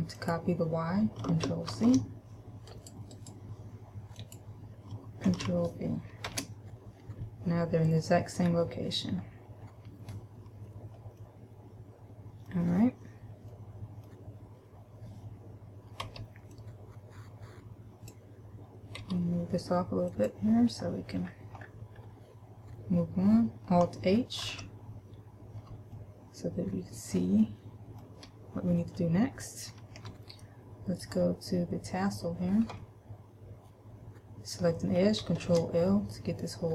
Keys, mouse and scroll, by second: 0.4 click, 3.3 right click, 4.3 click, 8.7-9.4 scroll down 2, 9.4-9.9 scroll down 1, 9.9-11.0 scroll up 1, 11.4 middle click, 13.7 middle click, 16.2 b, 19.2 g, 20.4 click, 21.1-22.2 scroll down 6, 22.2-23.2 scroll up 1, 23.2-23.7 scroll up 1, 24.7 alt+h, 26.2 shift+middle click, 27.7 shift+middle click, 28.7-29.4 scroll up 1, 29.4 scroll up 1, 30.2 a, 31.2 right click, 35.7 ctrl+l.